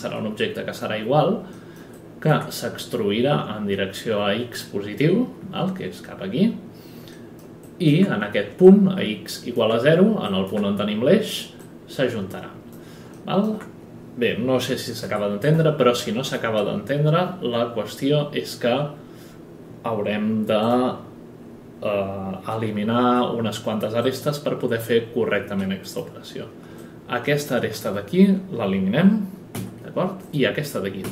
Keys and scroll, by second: 15.0 F11, 22.5 F11, 23.0 F10, 29.5 Delete, 31.0 Delete.